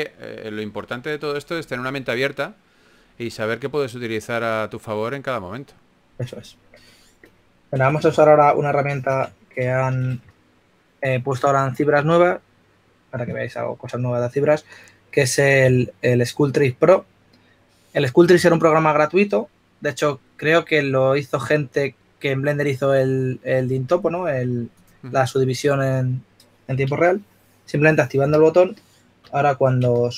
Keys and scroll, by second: 3.9 2, 5.1-5.8 typing, 8.3 typing, 16.6 3, 29.8 s.